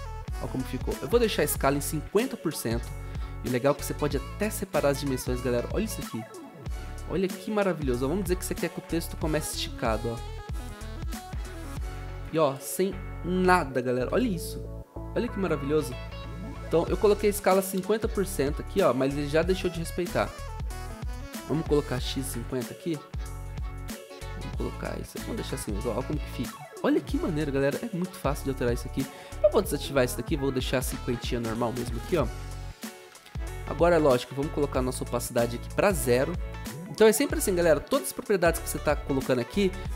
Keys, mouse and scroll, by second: 1.5-2.4 typing, 8.7 ctrl+z, 12.5 0, 14.3 0, 21.8-22.6 typing, 25.3 0, 26.7-27.4 typing, 36.2 Return.